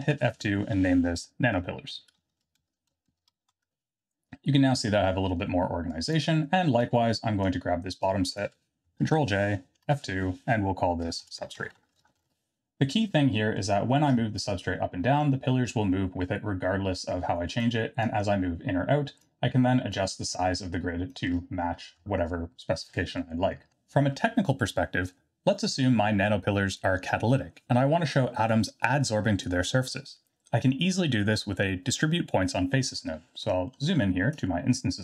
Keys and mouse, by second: 0.0 F2, 4.1 l, 5.2 middle click, 5.9 click, 6.9-7.5 drag, 8.1 click, 9.0 ctrl+j, 9.8 F2, 13.4 middle click, 14.5-17.6 shift+drag, 18.0-19.2 shift+drag, 19.9-21.1 shift+drag, 23.7 ctrl+z, 24.1 ctrl+z, 32.6 middle click, 33.6 middle click.